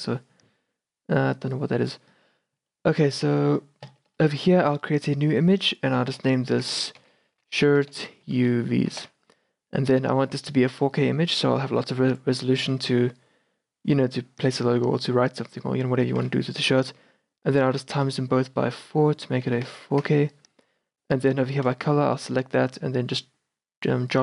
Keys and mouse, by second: 1.6-3.2 drag, 4.8-6.7 drag.